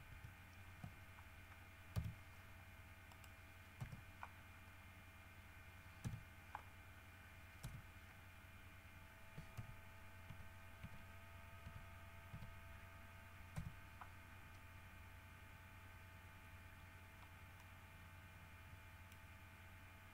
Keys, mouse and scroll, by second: 0.3 ctrl+KP_1, 2.2 KP_7, 3.3 middle click, 4.0 KP_Decimal, 4.8-5.3 scroll up 4, 6.2 KP_1, 7.1-7.4 scroll up 2, 7.9 KP_Decimal, 8.5-9.2 scroll up 4, 9.8 t, 10.5 t, 11.9 t, 12.7 t, 13.8 KP_Decimal, 14.5-14.8 scroll up 2, 15.0-15.4 scroll down 2, 15.6 scroll up 2, 17.1-17.7 scroll up 4, 17.8-19.6 middle drag.